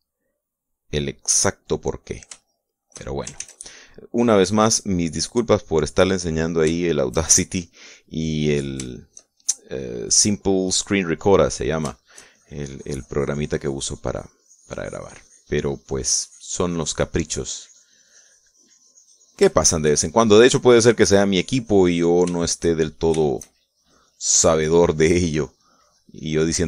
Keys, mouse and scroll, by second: 2.3 click, 3.2 shift+middle click, 4.2 ctrl+shift+s, 4.3 ctrl+click, 5.4 click, 6.4-7.5 drag, 7.6 shift+click, 8.6-10.5 shift+drag, 10.9 shift+middle click, 11.1 shift+click, 12.3 middle click, 13.1-20.3 shift+drag, 20.3 shift+middle click, 21.5-23.1 drag, 23.1 shift+click, 24.1 shift+click, 24.9 shift+click, 26.4 middle click.